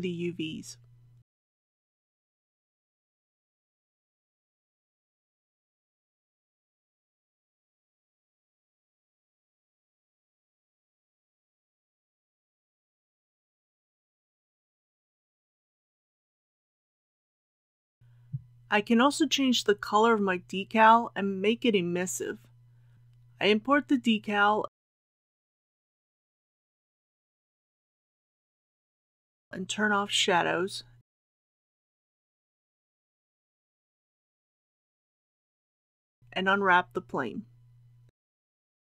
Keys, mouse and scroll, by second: 1.5-2.9 shift+right drag, 3.9-7.9 drag, 8.5 middle click, 9.8-10.1 scroll up 1, 10.1-10.6 scroll down 1, 10.6 middle click, 10.9 scroll up 1, 11.1 scroll down 1, 11.3-11.9 scroll up 1, 11.9 scroll down 1, 12.1-12.6 scroll up 1, 12.6-12.9 scroll down 1, 18.0 click, 18.5 scroll up 1, 22.9 typing, 24.2 click, 31.1-31.6 scroll down 1, 34.2-38.9 drag.